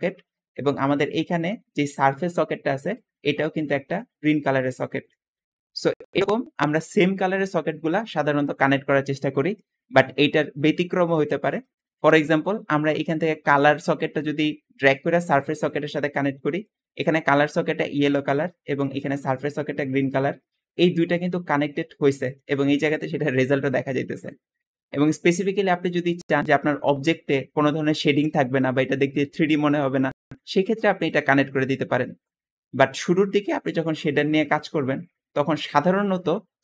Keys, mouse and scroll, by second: 0.6-2.8 drag, 3.2 click, 3.8 click, 6.1 Escape, 14.4-15.3 drag, 16.7 `, 19.0 click, 20.9 click, 21.3 click, 33.3 Escape, 34.3-35.2 drag.